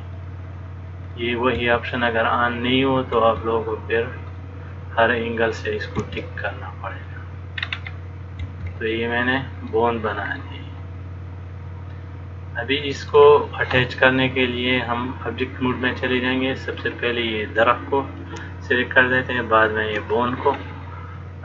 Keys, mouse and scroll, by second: 1.2 click, 1.8 e, 3.4 e, 5.6 click, 6.2 e, 7.8-8.2 scroll up 1, 8.6-9.9 scroll up 1, 8.6 e, 10.6 middle click, 14.6 click, 16.9 click, 19.4 shift+click.